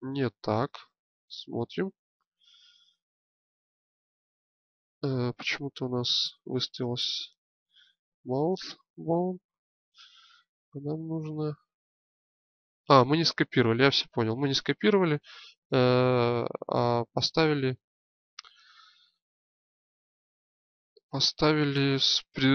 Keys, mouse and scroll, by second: 1.4-3.6 drag.